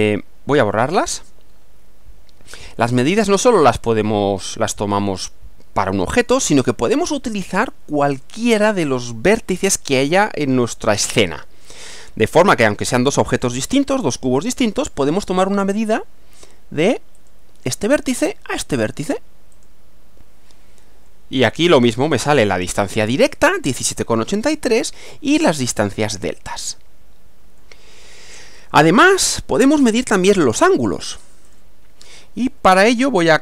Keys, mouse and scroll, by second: 1.0 click, 3.0-3.5 scroll up 2, 4.7 click, 6.1-7.3 middle drag, 7.4-8.4 shift+middle drag, 12.4-13.6 middle drag, 17.1 click, 19.5 click, 21.1-22.5 middle drag, 24.8-25.9 middle drag, 27.6-28.5 middle drag, 28.7 scroll down 1, 29.1-29.8 middle drag, 31.5 click.